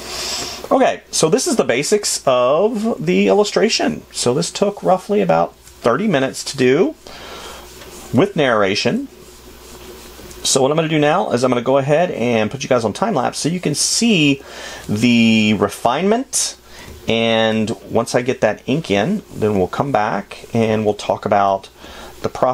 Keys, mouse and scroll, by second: 14.7 space.